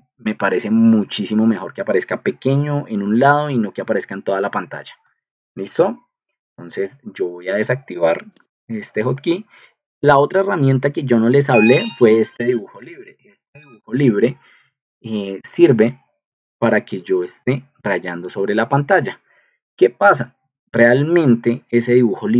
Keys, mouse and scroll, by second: 8.3 click, 12.0 drag, 20.0 Escape.